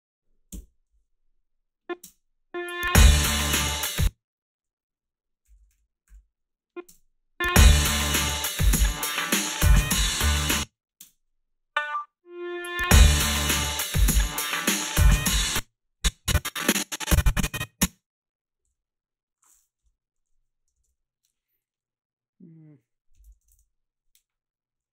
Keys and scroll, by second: 0.5 Return, 2.0 space, 3.8 space, 5.6 ,, 5.7 ,, 6.1 ,, 6.9 space, 10.3 space, 11.0 space, 15.3 space, 18.7 g, 19.8 Delete, 20.8 alt+shift+s, 22.9-23.9 typing.